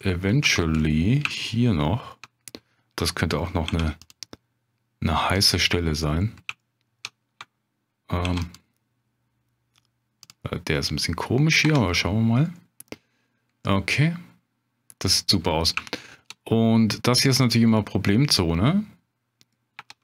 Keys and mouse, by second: 0.0 shift+click, 0.8 middle click, 1.3 shift+click, 3.7 ctrl+r, 5.3 click, 5.7 middle click, 6.6 shift+click, 8.2 ctrl+r, 10.2 click, 12.6 Tab, 13.7-15.2 middle drag, 15.9-16.2 shift+middle drag, 17.8-19.5 middle drag, 19.8 Tab.